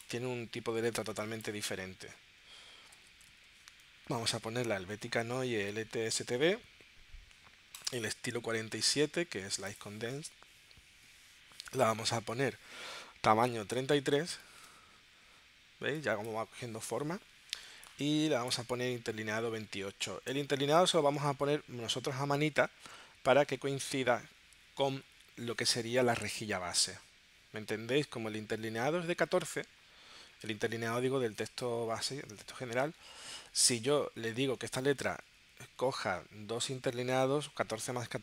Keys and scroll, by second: 3.0 h, 4.1 Tab, 14.2 3, 20.3 2, 20.8 8, 22.8 Tab.